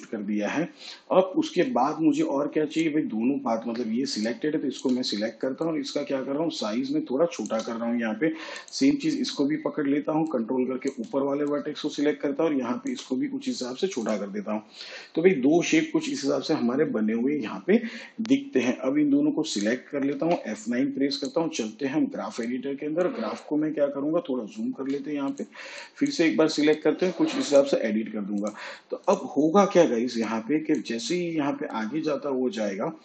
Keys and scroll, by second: 21.6 F9.